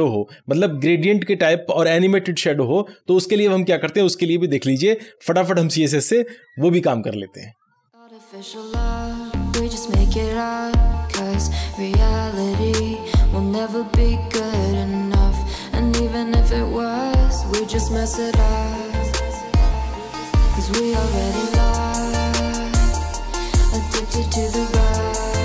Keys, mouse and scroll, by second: 8.0 scroll up 1, 8.9 scroll down 1, 9.8 click, 10.0 Return, 10.3 Up, 10.5 scroll down 1, 10.8-11.2 scroll up 1, 11.4 d, 11.7 Return, 12.3 shift+;, 12.8 Down, 12.9 Return, 13.5-19.0 typing, 13.8 Return, 15.2 Right, 15.5 Return, 16.0 Down, 16.1 Return, 16.7 Return, 16.8 Right, 17.0 Return, 17.8 Return, 20.0-23.9 typing, 24.3 Right, 24.6 Return, 25.1-25.4 typing.